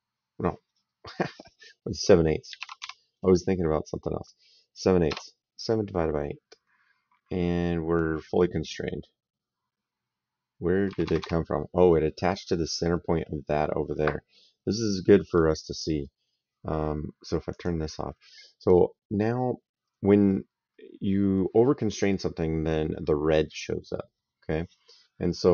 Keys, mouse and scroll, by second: 2.3 KP_7, 2.4 KP_Divide, 2.7 KP_8, 4.9 KP_Enter, 10.7 Escape, 17.3 click.